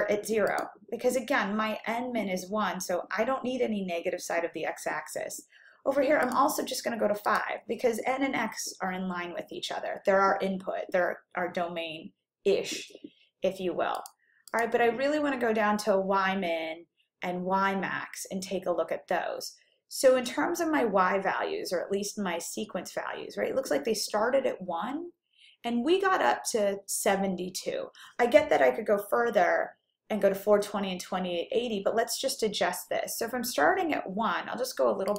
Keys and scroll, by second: 0.6 0, 6.3 Down, 7.4 5, 14.0 Down, 14.6 Down.